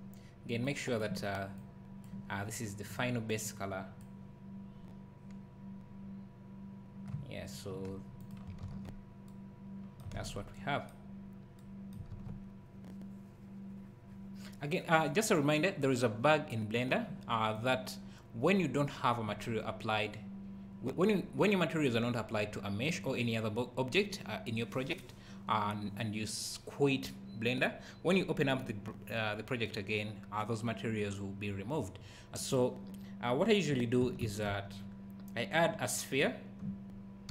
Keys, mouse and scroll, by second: 0.7 click, 0.8 click, 1.6 click, 8.2 click, 8.7 ctrl+s, 10.2 ctrl+s, 11.1 scroll down 1, 12.2 ctrl+s, 17.5 click, 32.4 click, 34.2 shift+a.